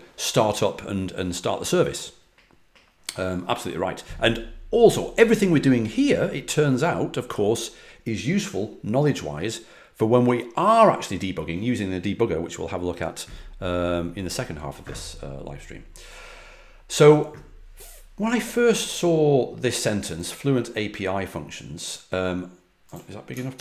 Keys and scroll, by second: 23.5 super+=.